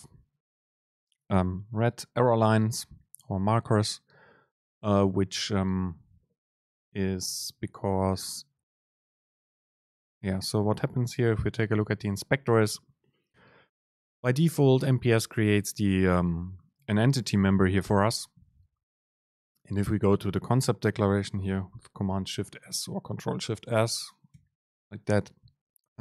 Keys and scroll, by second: 7.0 Down, 7.3 Up, 24.4 ctrl+alt+shift+s.